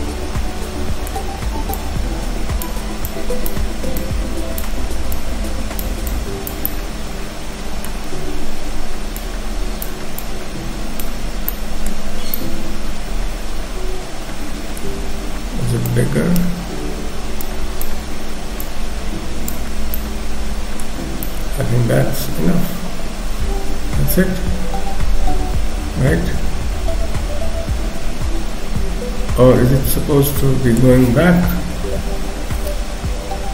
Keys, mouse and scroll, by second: 1.8 click, 3.1 click, 5.2 click, 6.1 click, 6.7 middle click, 9.3 click, 10.3 click, 11.2-11.7 scroll down 3, 11.5 middle click, 12.1 scroll down 2, 12.3 middle click, 14.9-16.1 scroll up 4, 16.1 click, 17.6 click, 18.0 scroll up 2, 18.7 click, 19.7-20.1 scroll down 4, 19.9 middle click, 21.0-21.6 scroll down 2, 21.3 middle click, 31.6 KP_3, 32.0-33.1 scroll up 5.